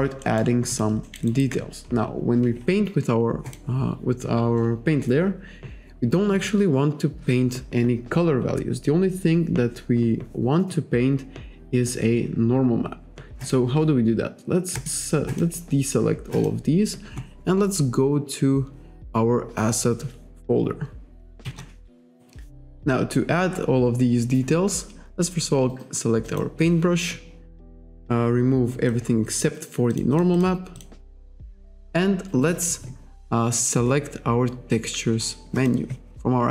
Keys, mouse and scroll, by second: 0.2 alt+middle click, 1.1 alt+middle click, 1.3 alt+right click, 3.5 click, 13.4 click, 14.8 click, 15.3 click, 16.3 click, 21.5 KP_5, 26.3 click, 28.9 click, 30.0 click, 30.4 click, 30.8 click, 35.6 click.